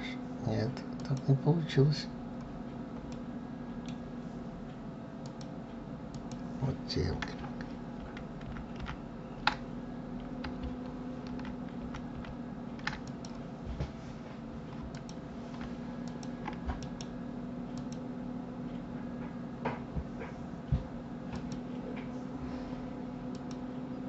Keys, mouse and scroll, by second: 0.8 click, 2.9-5.0 middle drag, 5.0 click, 5.9 click, 7.8 ctrl+z, 12.8 click, 13.9 scroll up 2, 14.7 click, 15.8 shift+click, 16.5 right click, 21.0 click, 23.1 click.